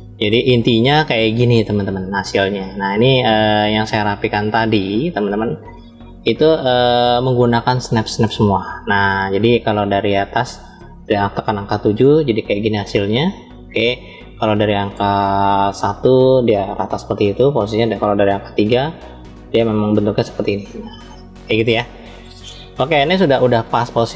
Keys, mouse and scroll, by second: 0.3-1.3 scroll up 3, 1.3-2.5 shift+middle drag, 3.7 scroll up 1, 4.3 click, 5.9 KP_Decimal, 6.9 scroll down 2, 8.0-10.0 middle drag, 8.0 scroll down 2, 11.2 KP_7, 15.5 KP_1, 18.3 KP_3, 20.3-23.6 middle drag, 23.6 scroll down 2.